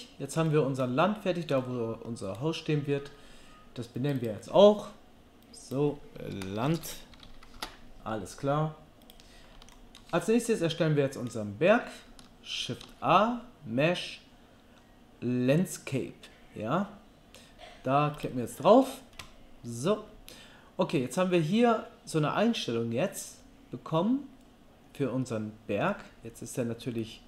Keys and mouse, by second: 9.1 click, 10.0-16.0 shift+right drag, 12.8 shift+a, 16.0-18.3 drag, 26.3 middle click, 26.7-27.2 right drag.